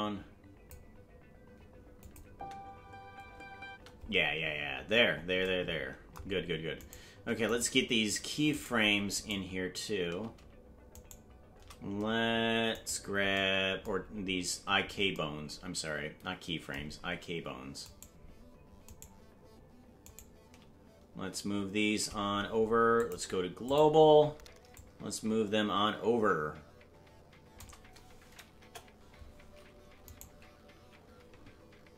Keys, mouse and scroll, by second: 2.0 click, 2.2 space, 5.0 space, 7.0 right click, 7.8 shift+right click, 8.8 shift+right click, 10.5 shift+right click, 13.0 shift+right click, 14.0-15.1 scroll down 4, 18.1 shift+right click, 19.3 shift+right click, 22.9-24.0 drag, 22.9 shift+right click, 24.7-27.6 shift+drag, 28.6 KP_0, 30.0-31.9 right drag.